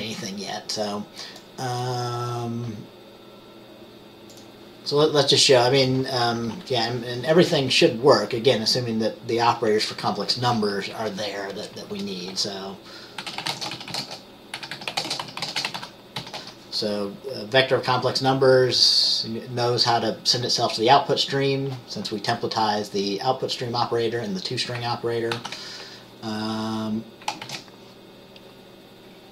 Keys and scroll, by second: 11.1 Up, 12.1 Return, 13.3-16.5 typing, 25.5 ctrl+s, 27.6 ctrl+b.